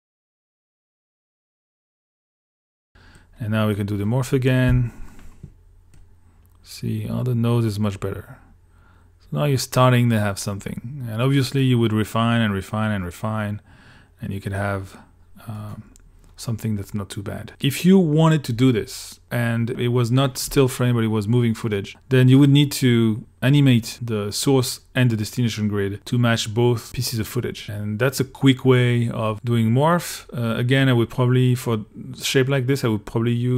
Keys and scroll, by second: 1.8 super+s, 4.7 q.